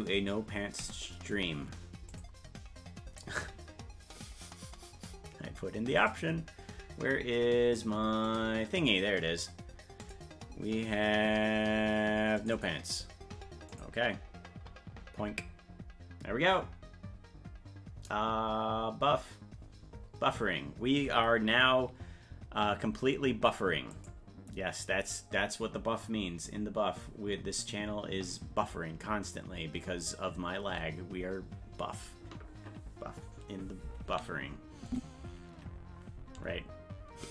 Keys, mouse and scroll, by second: 34.9 click.